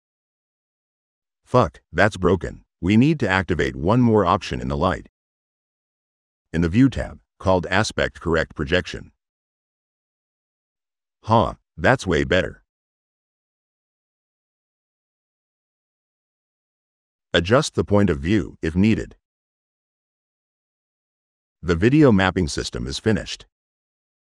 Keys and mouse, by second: 3.0 click, 5.1 click, 6.0 drag, 6.4 click, 7.2 click, 9.2 click, 10.4 middle click, 16.1 middle click, 16.5 click, 17.9 click, 18.3 click, 19.1 click, 19.6 right click, 20.0 middle click, 20.5 right click, 20.9 middle click, 21.5 click.